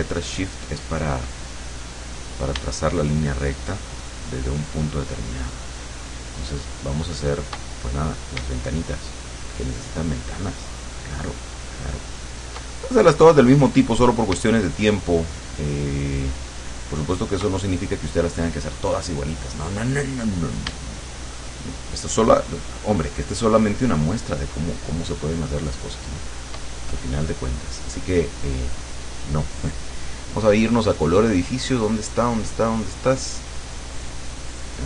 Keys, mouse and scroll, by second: 3.9-7.6 shift+drag, 9.3-12.6 shift+drag, 12.6 shift+right click, 13.7 click, 14.6-17.6 shift+drag, 22.0-26.7 shift+drag, 30.5-34.1 drag.